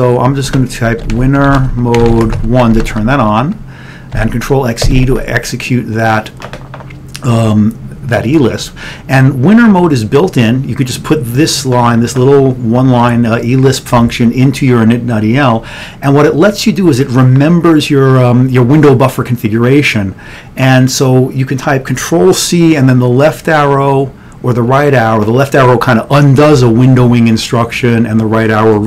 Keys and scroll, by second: 0.4-4.2 typing, 4.9 ctrl+x.